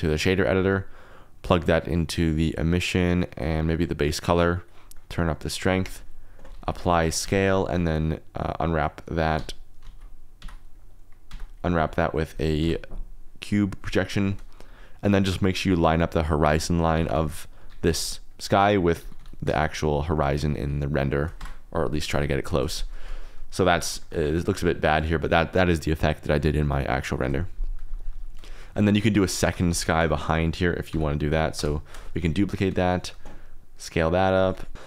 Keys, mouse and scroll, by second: 0.5 click, 2.2 click, 3.1-4.6 drag, 4.9 middle click, 5.4 click, 6.5 ctrl+a, 7.2 Tab, 10.3 a, 10.4 alt+z, 10.4 Tab, 10.7 click, 11.2 Tab, 11.6 alt+z, 12.5 u, 16.7 a, 16.9 g, 17.1 y, 17.5 Escape, 17.9 s, 18.9 g, 19.1 y, 21.0 shift+click, 21.3 Tab, 23.9 shift+click, 28.5 click, 28.6 middle click, 29.4 shift+d, 29.6 u, 30.8 y, 31.1 click, 31.5 KP_0, 32.1 s, 32.8-33.6 drag, 34.0 click, 34.3 r, 34.5 x.